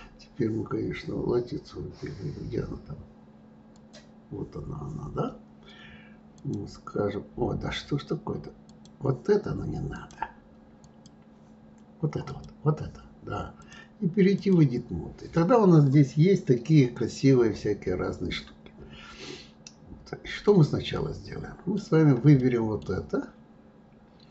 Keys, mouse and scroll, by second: 3.7 click, 6.3 click, 8.7 click, 9.9-12.4 drag, 13.5-15.3 drag, 15.3-18.4 middle drag, 20.9-24.3 middle drag.